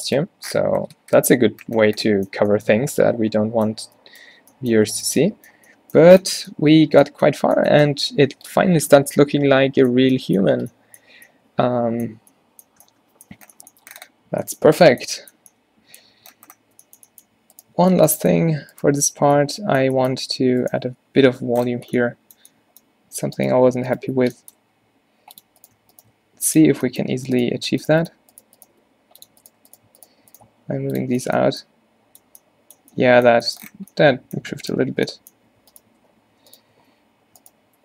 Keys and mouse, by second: 0.5-0.9 middle drag, 1.1-1.7 middle drag, 1.7-2.4 drag, 2.4 a, 2.8 a, 17.7-21.3 drag, 17.8 Tab, 20.3 g, 22.4-23.4 middle drag, 23.4-28.9 drag, 24.7 g, 26.2 g, 28.9-31.1 right drag, 28.9 g, 30.6 g, 31.1 Tab, 32.3 a, 33.4 Tab, 34.7-37.8 drag, 35.0 Tab, 35.4 Tab, 35.7 Tab, 36.0 Tab, 36.4 Tab, 36.8 Tab, 37.3 Tab.